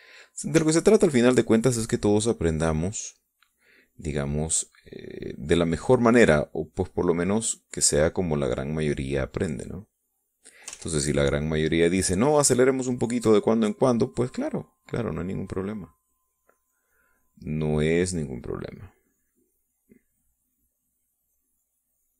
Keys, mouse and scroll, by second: 1.3 e, 1.8-4.2 drag, 4.7-6.3 drag, 7.1-10.7 drag, 10.8 click, 11.5 ctrl+z, 11.9 ctrl+click, 14.1-17.6 drag, 18.5-22.1 drag.